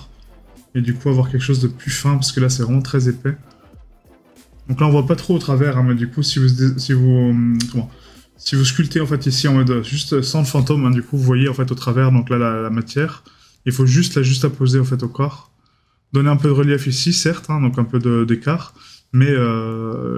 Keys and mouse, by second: 10.9 right click.